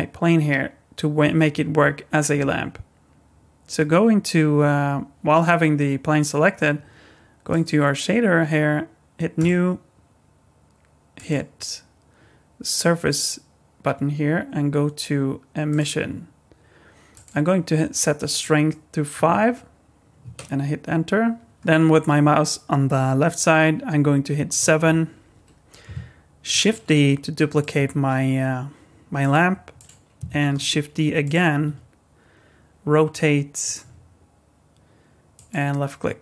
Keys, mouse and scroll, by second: 7.5 click, 9.3 click, 11.2 click, 17.1 click, 24.5 KP_7, 26.5 shift+d, 27.8 r, 29.4 g, 30.6 shift+d, 31.7 r, 33.8 g.